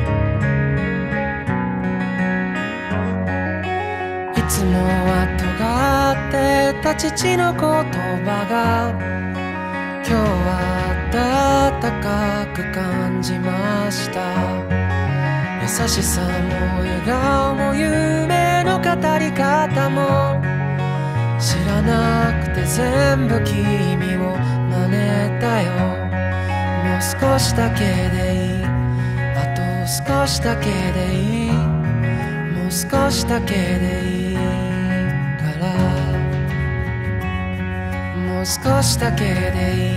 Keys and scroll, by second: 1.3 ctrl+shift+z, 3.0 ctrl+z, 3.8 ctrl+z, 5.1 ctrl+z, 5.3 ctrl+z, 6.9 ctrl+z, 7.1 ctrl+z, 8.7 ctrl+z, 14.3 ctrl+z, 14.6 ctrl+z, 19.7 ctrl+z, 20.1 ctrl+z, 20.6 ctrl+z, 22.6 ctrl+z, 22.8 ctrl+z, 23.2 ctrl+z, 23.9 ctrl+z, 24.6 ctrl+z, 31.4 ctrl+z, 31.7 ctrl+z, 32.0 ctrl+z, 32.4 ctrl+z, 36.2 ctrl+z, 36.8 ctrl+z.